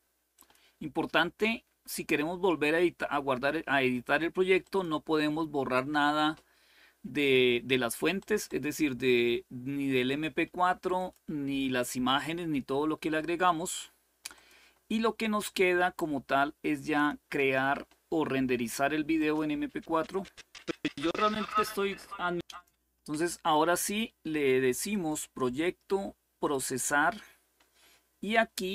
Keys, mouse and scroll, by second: 0.0 click, 4.3 click, 7.9 click, 8.9 click, 10.6 click, 14.0-17.4 drag, 18.9 click, 22.2-23.2 drag, 24.6 click, 26.1 click.